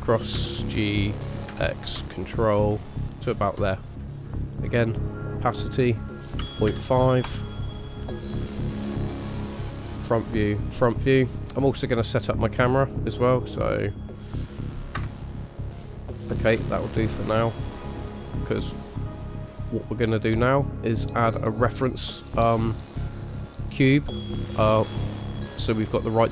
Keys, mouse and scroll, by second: 0.3 g, 5.0 click, 5.7 click, 8.6 scroll up 1, 9.8 click, 10.5 click, 11.1 scroll up 1, 11.1 scroll down 2, 11.4 middle click, 13.9 click, 14.9 KP_0, 15.7 scroll down 2, 16.3 middle click, 17.1-17.6 scroll down 2, 17.6 middle click, 19.2 middle click, 22.2 middle click.